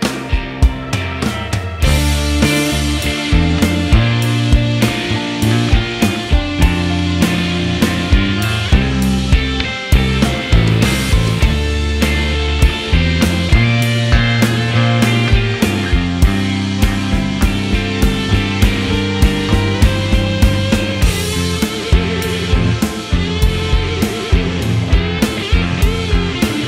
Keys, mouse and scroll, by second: 0.4 ctrl+z, 0.5 a, 0.7 click, 0.9 click, 1.8 click, 2.1 click, 2.5 click, 3.0 middle click, 4.0 x, 4.1 middle click, 4.3 a, 4.3 m, 4.5-5.0 scroll down 2, 4.5 middle click, 4.9 click, 5.0 middle click, 5.1 Tab, 5.2 middle click, 5.3 click, 5.3 middle click, 5.6 scroll up 2, 5.8 scroll down 1, 5.8 middle click, 6.5 click, 6.7 s, 7.5 middle click, 8.2 middle click, 8.4 scroll down 4, 8.5 middle click, 8.6 Tab, 8.7 Tab, 8.7 middle click, 8.8 click, 8.9 middle click, 9.8 click, 9.8 middle click, 10.1 click, 10.3 middle click, 10.4 Tab, 10.5 a, 10.6 m, 10.8 middle click, 11.8 middle click, 12.4 middle click, 12.7 Tab, 12.8 click, 12.8 Tab, 13.0 alt+h, 13.1 click, 13.2-15.4 typing, 13.7 click, 14.2 middle click, 14.4 click, 14.7 shift+middle click, 14.9 click, 15.1 click, 15.5 shift+middle click, 15.6 click, 16.1 middle click, 16.2 scroll down 2, 16.2 middle click, 16.4 click, 16.7 click, 16.8 middle click, 16.9 KP_1, 17.4 click, 17.9 shift+d, 18.2 s, 18.9 scroll down 1, 18.9 middle click, 19.5 scroll down 3, 19.5 middle click, 19.8 scroll up 2, 19.9 shift+middle click, 20.1 shift+middle click, 20.6 shift+middle click, 20.7 scroll up 1, 20.7 shift+middle click, 21.1 click, 21.2 middle click, 21.7 click, 22.1 ctrl+z, 22.3-24.7 typing, 22.6 click, 23.1 middle click, 23.8 middle click, 24.0 scroll up 1, 24.2 scroll down 2, 24.4 shift+middle click, 24.5 scroll up 3, 24.5 shift+middle click, 24.9 shift+middle click, 24.9 Tab, 25.1 click, 25.1 Tab, 25.2 click, 25.7 alt+right click, 26.0 ctrl+right click, 26.2 ctrl+right click, 26.6 ctrl+right click.